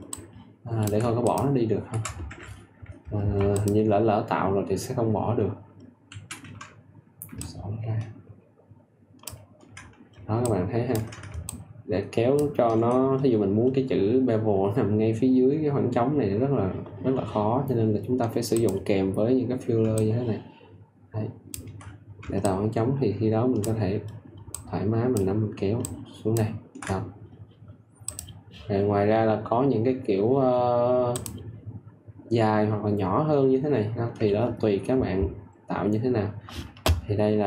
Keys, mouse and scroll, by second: 0.0 ctrl+click, 2.2 Escape, 3.5-4.6 drag, 7.3 alt+click, 10.4 ctrl+alt+click, 11.4-19.6 ctrl+drag, 19.9 alt+click, 22.4 ctrl+alt+click, 26.8 ctrl+alt+click.